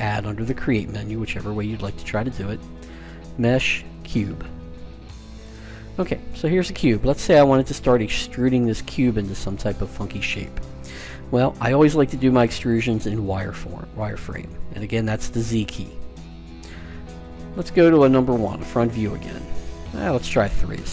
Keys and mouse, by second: 1.0 space, 6.5-8.9 middle drag, 12.5-14.3 drag, 15.2 z, 15.7 z, 18.0 KP_1, 20.1 KP_3.